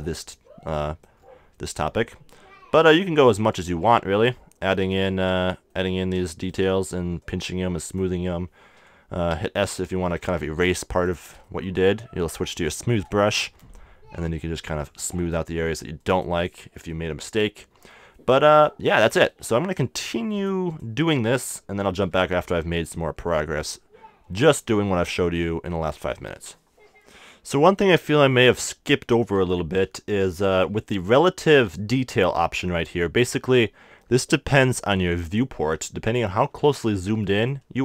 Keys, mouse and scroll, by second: 5.5-7.2 middle drag, 7.2-9.3 drag, 9.3 s, 10.1 f, 11.0-13.2 drag, 13.2-16.7 middle drag, 14.4-18.1 drag, 16.9-17.9 middle drag, 18.1 middle click, 20.4-23.0 drag, 23.1 middle click, 23.3 middle click, 25.1-27.0 middle drag, 27.6-29.4 middle drag, 29.5-37.5 middle drag, 37.5-37.8 drag.